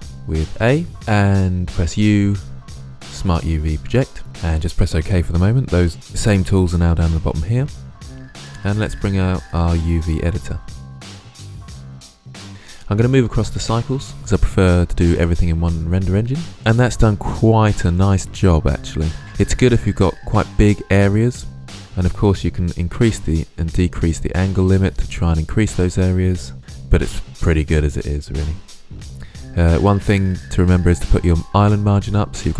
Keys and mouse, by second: 0.0 n, 1.1 u, 8.1-9.4 middle drag, 9.4 click, 11.1-11.7 drag, 12.7-14.2 drag, 22.4-26.6 drag, 30.2-32.5 drag.